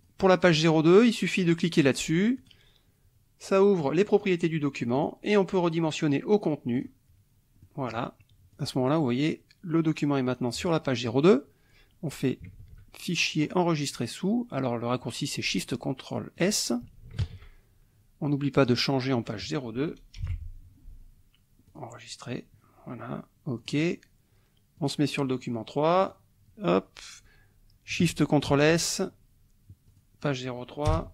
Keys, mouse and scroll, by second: 0.0 click, 2.4 click, 3.8 click, 4.9 click, 6.7 click, 7.6 right click, 8.5 click, 13.4 click, 16.3 click, 17.2 ctrl+shift+s, 18.6 click, 20.2 BackSpace, 20.2 KP_2, 21.6 click, 23.6 click, 24.7 click, 26.0 click, 28.4 ctrl+shift+s, 29.9 click, 30.8 BackSpace.